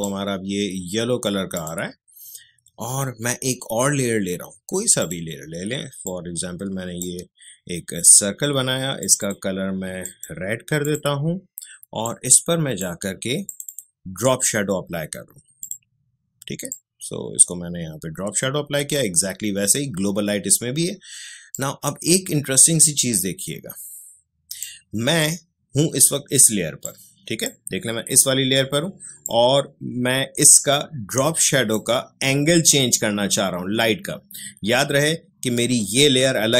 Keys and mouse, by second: 5.0-21.5 drag, 21.5-26.8 drag, 26.8-36.5 drag.